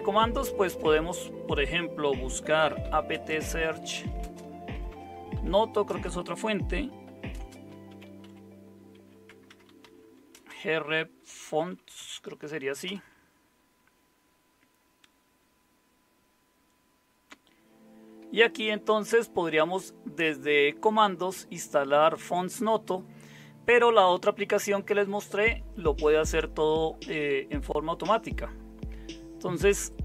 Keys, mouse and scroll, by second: 2.4-5.9 typing, 7.0-12.8 typing.